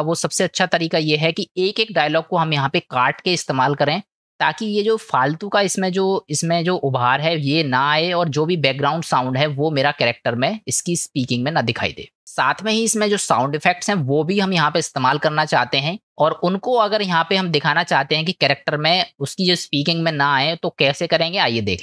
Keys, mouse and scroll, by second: 2.3 click, 16.0 middle click.